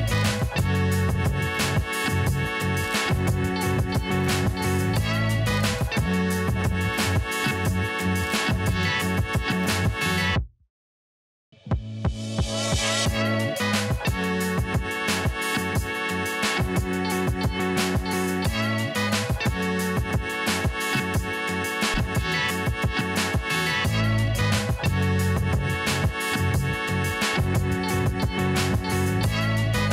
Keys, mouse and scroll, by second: 0.7-1.4 scroll up 1, 1.4-5.3 drag, 6.7 alt+scroll down 1, 7.3-8.0 scroll down 2, 8.4-8.8 alt+scroll up 1, 9.0 alt+scroll down 1, 9.2 right click, 9.5-12.2 drag, 12.2 click, 12.9 right click, 13.2 click, 17.6-27.8 drag, 27.8-28.9 scroll down 1, 28.9 click.